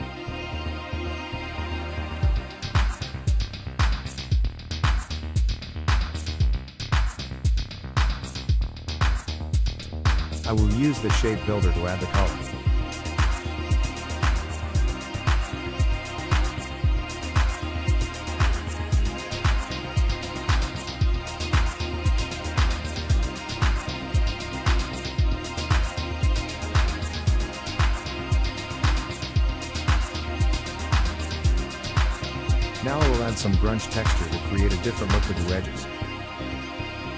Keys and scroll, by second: 0.0 Up, 0.4 Up, 36.0 ctrl+v, 36.3 ctrl+x.